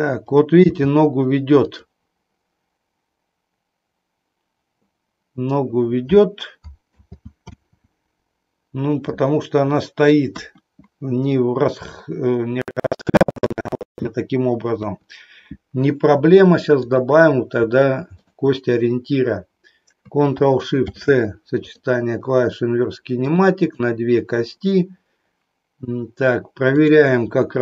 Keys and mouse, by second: 0.6 g, 6.9 ctrl+z, 10.4 KP_1, 14.7 KP_3, 16.7 click, 18.1 shift+click, 20.7 ctrl+shift+c, 23.2 click, 23.7 click, 26.7 click.